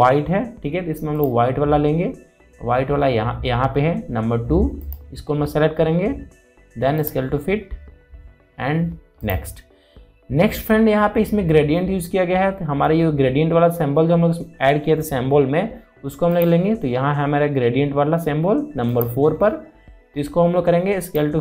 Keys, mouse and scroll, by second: 1.8 click, 5.5 click, 17.0 click, 19.5 click.